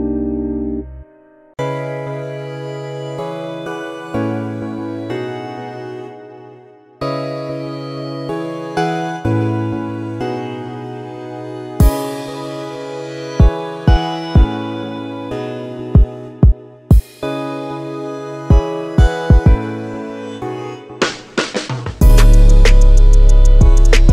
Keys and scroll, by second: 1.0-2.2 typing, 15.2 Escape, 16.5 Escape.